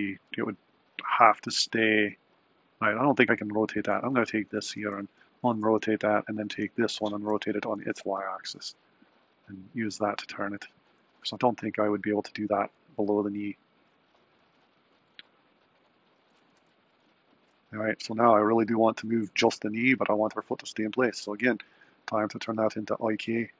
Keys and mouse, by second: 4.1 click, 5.1 alt+r, 6.2 click, 7.0 r, 15.9 click, 16.6 r, 20.4 click, 22.3-23.5 drag.